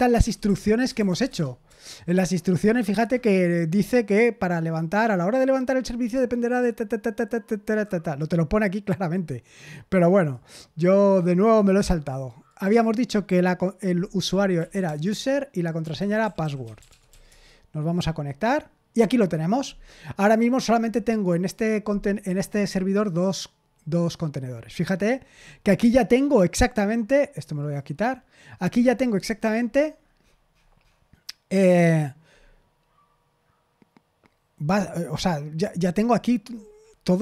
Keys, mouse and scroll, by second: 0.0-1.6 typing, 10.1 click, 11.0 click, 11.7 click, 11.8 click, 12.4 click, 13.9-17.2 typing, 22.9 click, 24.9-25.6 scroll down 1, 27.5 click, 28.5-29.0 scroll down 1, 29.0-30.2 scroll up 2, 30.2-31.6 scroll down 2, 32.2-33.3 scroll down 2, 35.9-37.2 scroll up 6.